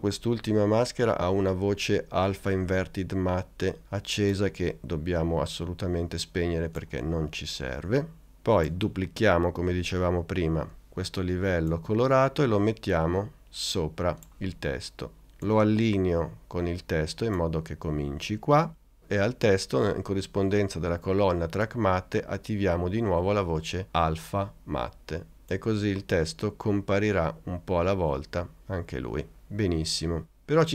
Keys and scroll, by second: 10.8 super+d.